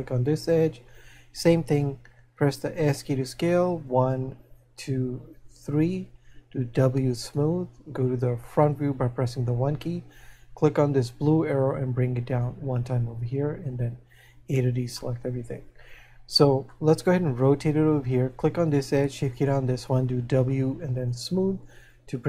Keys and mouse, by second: 6.7 w, 11.9 click, 14.9 a, 15.0 middle click, 17.3 middle click.